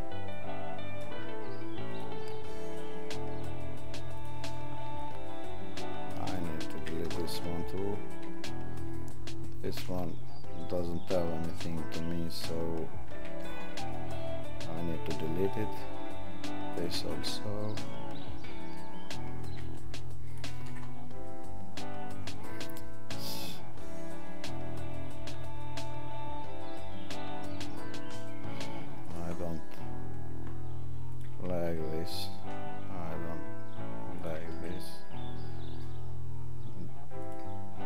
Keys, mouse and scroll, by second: 4.1 click, 12.3 click, 13.2 right click, 16.7 click, 29.0 click, 31.1 click, 31.7 right click, 34.1 click, 37.2 click.